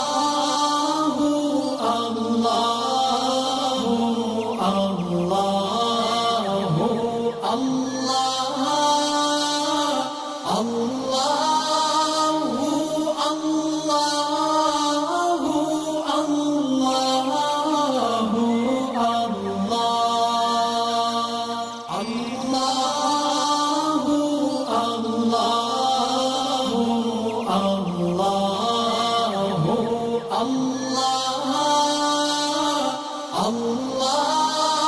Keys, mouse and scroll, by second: 0.3 alt+scroll up 1, 0.8 alt+scroll down 1, 1.2 space, 1.2 click, 1.8 alt+scroll up 1, 2.7 alt+scroll down 1, 2.9 space, 2.9 click, 4.3 space, 4.3 click, 5.4-6.3 alt+drag, 7.4 right click, 8.5 click, 11.1 alt+scroll up 1, 11.4 space, 11.6-13.7 drag, 13.7 space, 13.8 click, 15.9 ctrl+shift+], 18.3-21.3 drag, 22.2 space, 22.2 click, 22.8 alt+scroll down 1, 23.5 alt+scroll up 1, 24.1-27.4 drag, 29.3 alt+scroll down 1, 30.0 alt+scroll up 1, 30.5 space, 30.5 click, 30.9 alt+scroll up 1, 31.2-34.2 drag.